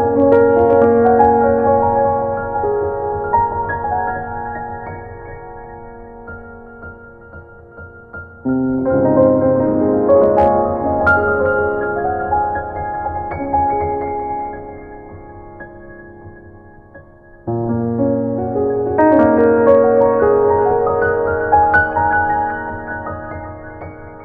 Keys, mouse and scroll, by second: 0.8 click, 2.3 middle click, 2.9 scroll up 1, 3.2 click, 3.2 middle click, 3.5 scroll down 2, 3.9 scroll down 2, 4.5 click, 9.2 scroll down 2, 10.9 click, 11.7 click, 12.7 click, 12.9 click, 14.6 click, 16.7 click, 19.7 scroll down 1, 19.9 scroll up 1, 20.1 click, 21.7 middle click, 23.3 ctrl+z, 23.8 ctrl+z.